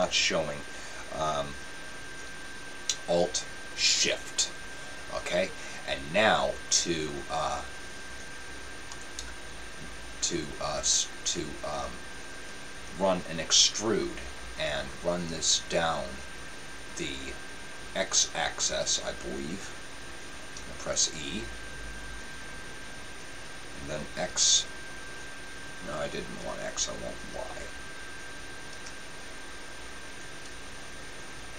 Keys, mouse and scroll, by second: 21.0 e.